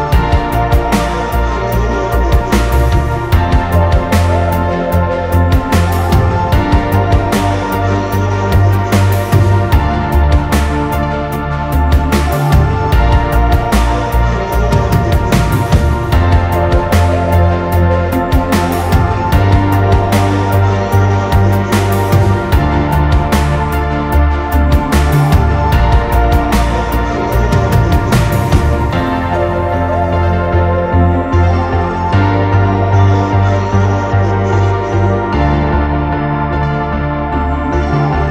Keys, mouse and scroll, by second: 1.9 middle click, 2.1 scroll up 1, 2.7 scroll down 1, 3.0 middle click, 3.4 space, 3.8 double click, 3.9 right click, 6.4-7.1 scroll down 1, 8.1 scroll down 1, 10.6 right click, 13.7 scroll up 1, 14.0 m, 15.0 scroll down 1, 15.2 middle click, 16.0 scroll up 1, 16.3 scroll down 1, 16.5-17.3 typing, 18.7 double click, 19.3 typing, 20.7-21.9 scroll down 1, 26.8 scroll down 1, 27.2 scroll up 1, 27.9 typing, 28.9 scroll down 1, 29.8-30.4 scroll down 1, 30.5 scroll down 1, 30.6 middle click, 30.9 scroll up 1, 31.9 t, 32.1-32.4 scroll down 1, 33.6 7, 33.8 Return, 35.4-35.7 scroll down 1, 36.5 scroll up 1, 36.6 scroll down 1, 36.8-37.6 scroll up 1, 37.6 i.